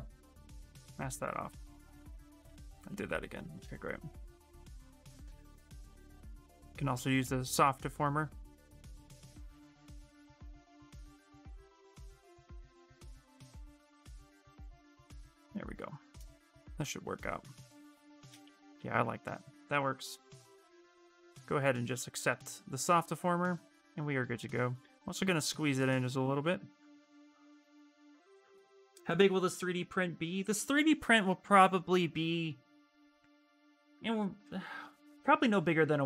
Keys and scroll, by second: 0.9 w, 2.8 w, 8.7 x, 10.8 ctrl+z, 14.3 y, 17.0 q, 18.2-20.2 typing, 26.4 q.